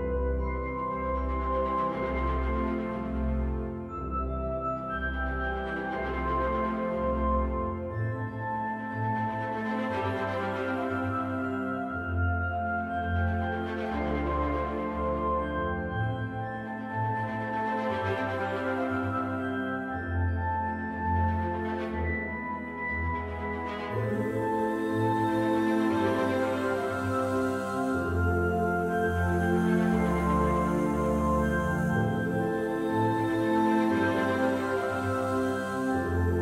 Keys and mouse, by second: 1.7 s, 3.1 right click, 3.9-5.6 middle drag, 6.3-8.6 middle drag, 14.6 ctrl+KP_Subtract, 17.6 click, 18.9 shift+d, 20.6 ctrl+z, 21.8 right click, 22.4 ctrl+z, 24.1 shift+a, 28.3 e, 29.5 r, 30.9 x, 31.2 KP_9, 31.3 KP_0, 31.6 KP_Enter, 32.8 s, 34.1 click, 34.8 middle drag, 35.6 KP_1.